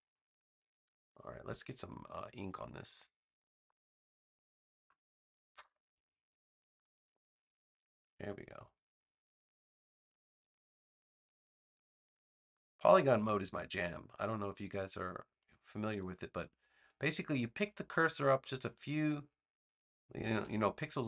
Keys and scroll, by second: 20.1 a.